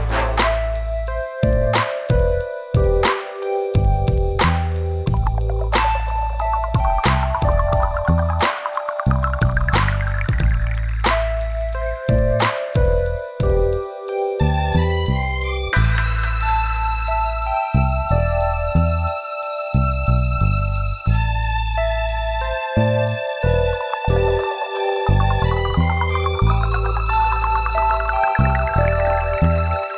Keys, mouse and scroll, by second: 0.2-0.5 scroll up 1, 1.1 click, 1.7 scroll up 2, 2.7 scroll down 2, 6.1 scroll up 2, 6.9 click, 8.7 scroll down 2, 9.8 click, 11.3 Delete, 12.6 middle click, 14.1 click, 14.1 click, 15.7 click, 15.7 click, 16.0 click, 16.1 click, 16.2 right click, 16.3 double right click, 17.1 click, 17.2 click, 18.1 click, 22.1 click, 22.9 click, 24.5 click, 28.3 click, 28.4 click, 28.9 click.